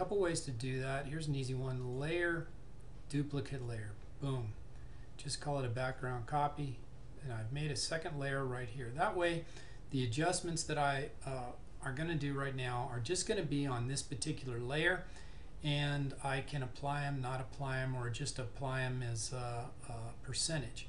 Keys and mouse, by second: 1.9 click, 1.9 typing.